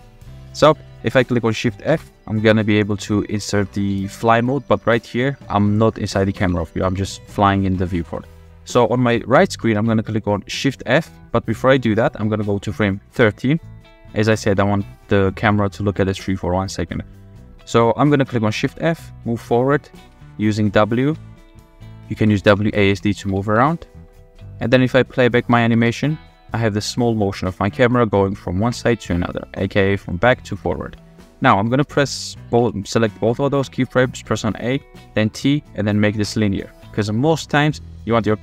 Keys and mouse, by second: 0.0 shift+middle click, 1.8 shift+f, 10.9 click, 11.6 click, 13.2-14.3 drag, 18.6 shift+f, 21.1-23.5 typing, 23.7 click, 24.9-25.4 drag, 25.7 space, 27.6 click, 28.5 space, 29.2 click, 30.1 click, 30.4 space, 31.6 space, 31.9 click, 32.6 a, 34.1 click, 35.2 t, 37.2 click.